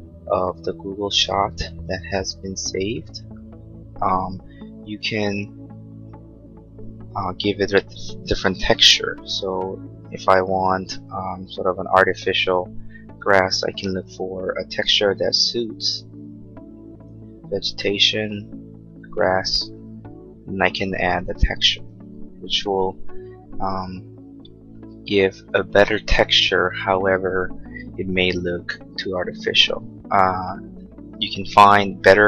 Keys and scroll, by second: 11.7 b, 22.1 space, 22.7 Escape.